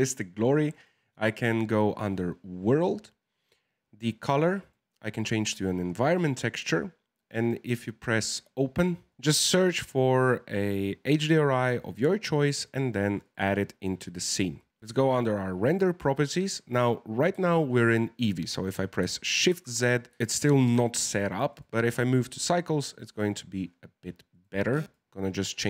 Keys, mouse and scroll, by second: 0.7 click, 4.5-9.2 drag, 14.8 click, 19.5 shift+z, 21.4-25.6 drag.